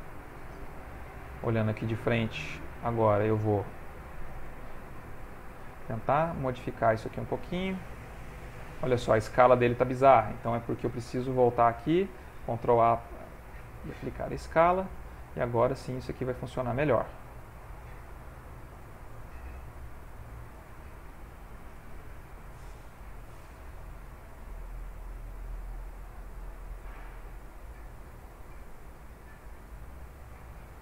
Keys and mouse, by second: 0.1 alt+click, 1.7 ctrl+Tab, 2.6 ctrl+Tab, 4.4 click, 5.1 shift+middle click, 6.3 click, 11.1 ctrl+Tab, 12.6 ctrl+a, 13.9 ctrl+Tab, 15.4 click, 16.8 f, 18.3 click, 19.6 click, 19.9 click, 20.4 click, 20.6 click, 22.0 click, 22.4 click, 24.1-24.7 alt+click, 25.6 click, 26.9 shift+middle click, 28.1 click.